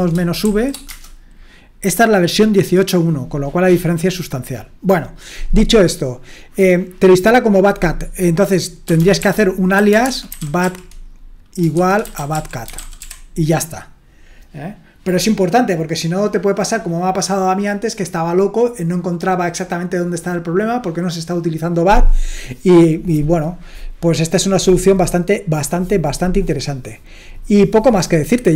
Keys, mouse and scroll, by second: 0.0-0.9 typing, 8.6-13.5 typing.